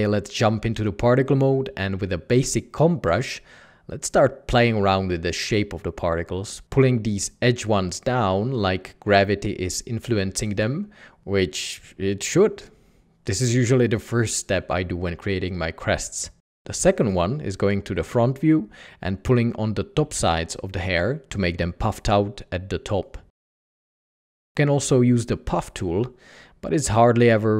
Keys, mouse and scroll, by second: 15.1 1, 17.6 s.